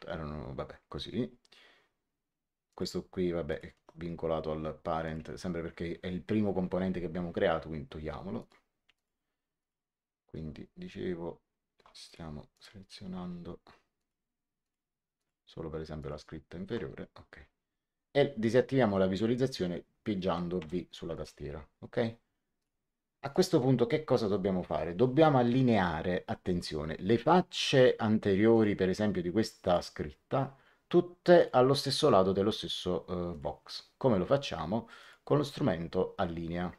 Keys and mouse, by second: 2.6 click, 3.6 right click, 4.9 click, 8.3 ctrl+click, 12.0 click, 13.9 ctrl+click, 20.5 v, 21.1 click, 22.5 click, 27.7 click, 29.6 click, 31.3 click, 33.2 click, 34.9 click.